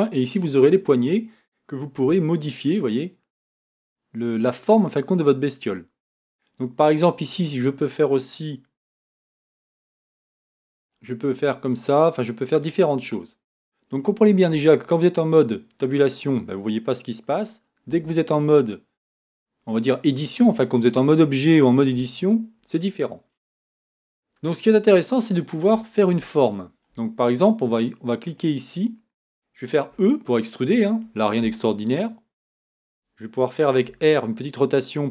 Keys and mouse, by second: 1.7-5.5 drag, 2.0 g, 7.1-12.8 drag, 14.5 Tab, 17.8 Tab, 29.9 e, 33.8 r.